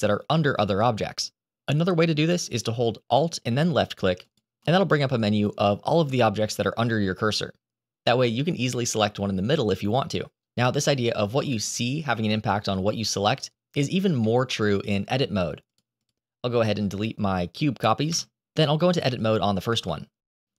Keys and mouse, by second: 4.2 alt+click, 14.1-14.7 middle drag, 15.5 shift+click, 15.9 shift+click, 16.4 shift+click, 18.0 Delete, 19.5 Tab, 20.3-20.5 shift+right drag.